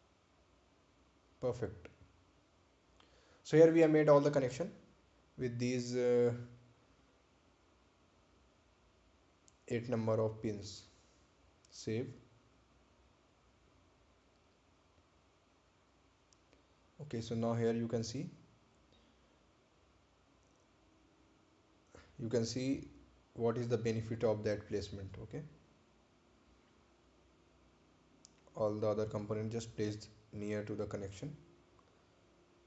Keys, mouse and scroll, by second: 0.0 right click, 1.7 click, 11.8 ctrl+click, 13.8 ctrl+click, 15.8 ctrl+click, 16.9 ctrl+click, 17.8 ctrl+click, 19.7 ctrl+click, 23.0 ctrl+click, 26.9-27.8 scroll down 1, 28.7-29.1 scroll up 1, 30.4 scroll down 1, 31.5 ctrl+click.